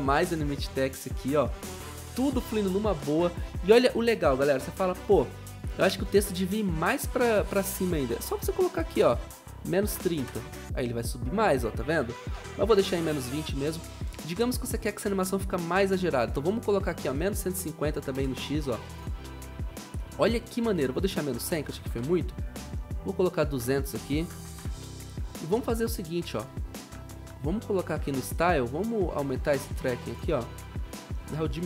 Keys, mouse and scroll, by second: 3.8 typing, 8.4-9.7 typing, 9.8 Return, 12.3 ctrl+z, 16.8 click, 16.8-18.6 typing, 21.3-22.3 typing, 23.7-24.5 typing.